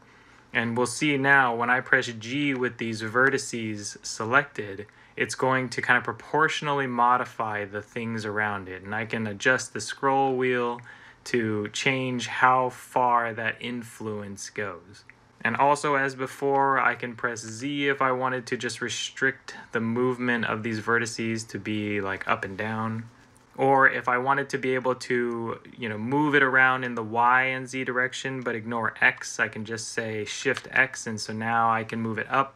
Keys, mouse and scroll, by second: 2.4 g, 17.2 z, 30.4 x.